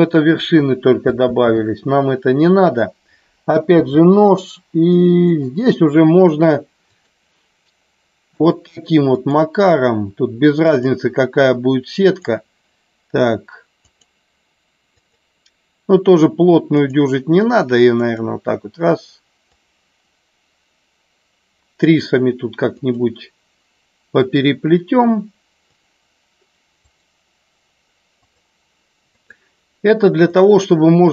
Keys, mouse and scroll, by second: 1.2 ctrl+z, 3.6 k.